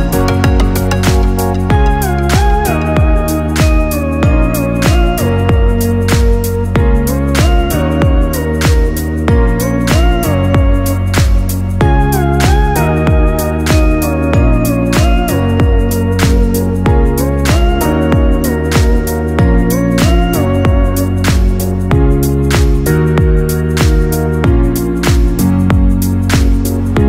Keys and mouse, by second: 1.6 r, 5.1 g, 8.7-10.2 middle drag, 10.2 g, 13.5-16.0 ctrl+middle drag, 16.0 g, 19.2-22.0 ctrl+middle drag, 22.0 r.